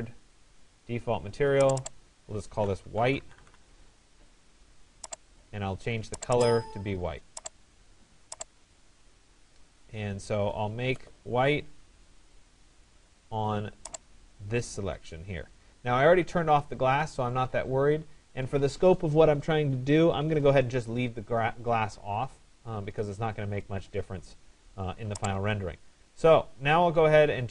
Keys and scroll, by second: 2.7 shift+w, 3.3 i, 3.5 e.